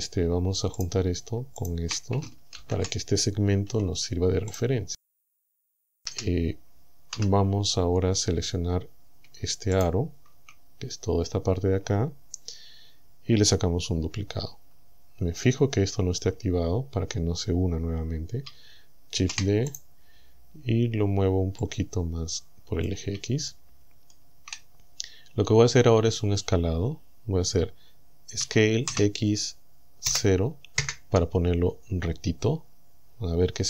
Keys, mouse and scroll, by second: 0.8 right click, 1.6 shift+right click, 2.6 ctrl+j, 3.7 Tab, 4.6 right click, 6.1 a, 7.2 z, 7.8-8.1 scroll up 2, 9.8 alt+shift+right click, 10.6 scroll down 2, 19.2 shift+d, 19.8 shift+right click, 21.7-23.1 drag, 23.5 shift+middle click, 28.4 s, 28.9 x, 30.1 KP_0, 30.8 KP_Enter.